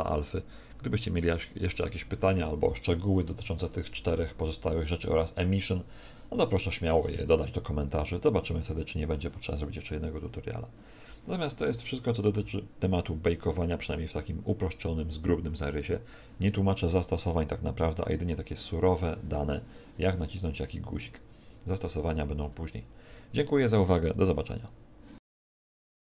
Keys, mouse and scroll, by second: 14.7-15.3 scroll up 1, 15.3-16.2 scroll down 1, 17.4 click.